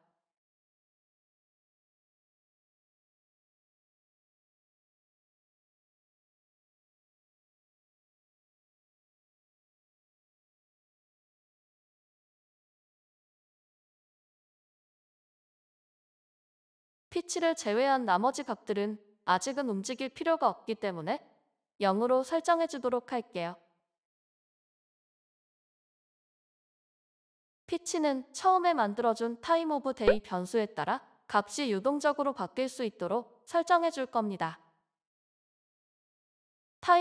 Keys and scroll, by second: 11.6 BackSpace, 12.7-14.1 typing, 16.0 BackSpace, 16.9 BackSpace, 19.0 BackSpace, 22.4 ;, 23.1 ctrl+s.